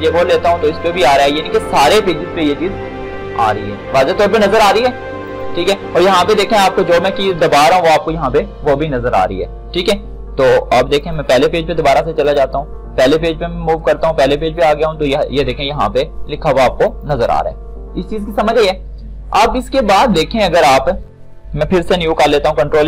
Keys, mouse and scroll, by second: 5.2 click, 10.9 click, 16.8 click, 21.4 click, 22.0 ctrl+n.